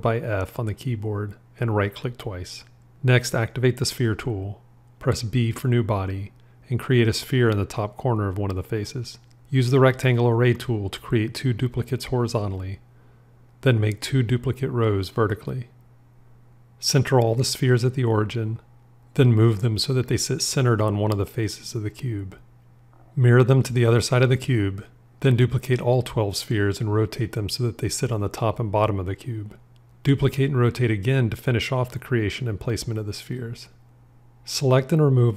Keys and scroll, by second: 0.4 f, 6.4 b, 19.0 g, 23.7 alt+x, 26.9 r.